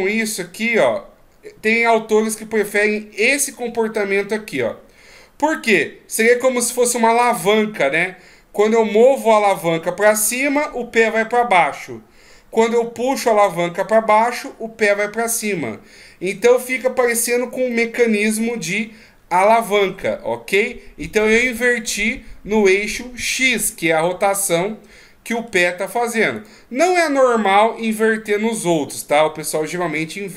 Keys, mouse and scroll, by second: 8.6 r, 17.7 middle click, 23.7 middle click, 26.4 right click.